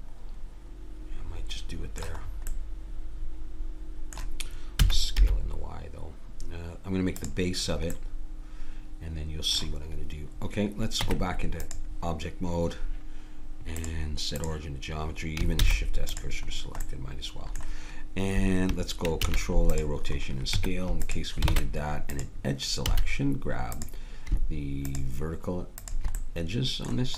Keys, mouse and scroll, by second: 2.3-4.0 middle drag, 4.8 s, 7.9-11.0 middle drag, 11.0 Tab, 13.8-15.6 drag, 15.6 shift+s, 19.3 ctrl+a, 20.5 Tab, 21.5 ctrl+Tab, 22.8 a, 23.7-27.1 drag, 26.6 middle click.